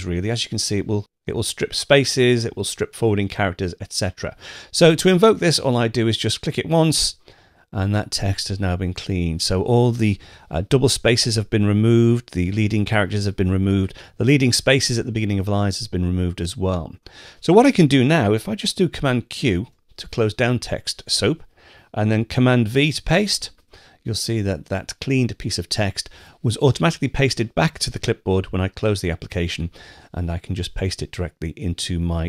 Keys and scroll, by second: 19.5 super+q, 23.0 super+v.